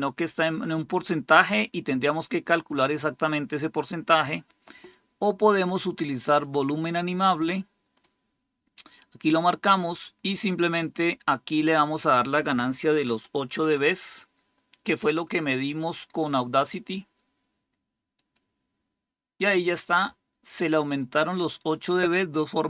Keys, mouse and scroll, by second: 4.0 click, 6.3-7.9 drag, 9.8 click, 11.7 click, 13.0 Delete, 13.5 8, 18.1 click, 21.4 click.